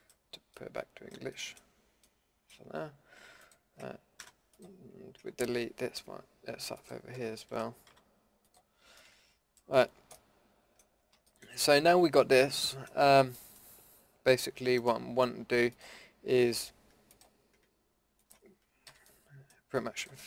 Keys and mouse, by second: 1.1-1.8 middle drag, 2.0 middle click, 3.4 middle click, 4.2 Delete, 7.9 Delete, 9.0 middle drag, 10.5 middle click, 11.8 middle click, 12.3 middle click, 14.8-16.4 drag, 16.4 a, 18.9 f, 19.1 middle drag.